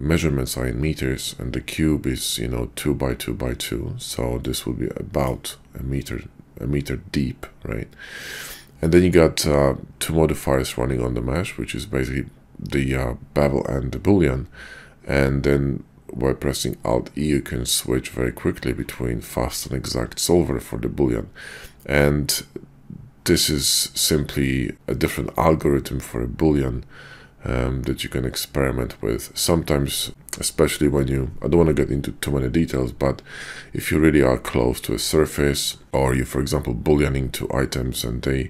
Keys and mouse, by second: 1.4-4.3 middle drag, 4.3-38.4 drag.